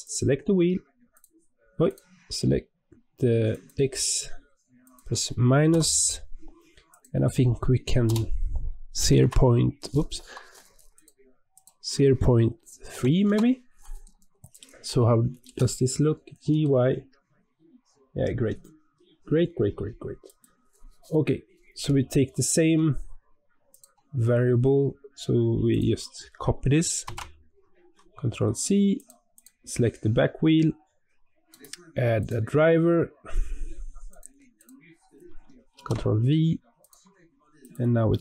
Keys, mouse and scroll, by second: 1.0 click, 3.4-6.5 drag, 10.8-13.9 drag, 14.3 click, 15.3 g, 23.6 click, 25.6-28.7 drag, 29.2 click, 31.4-34.4 right drag, 34.5-36.8 drag, 37.5 click.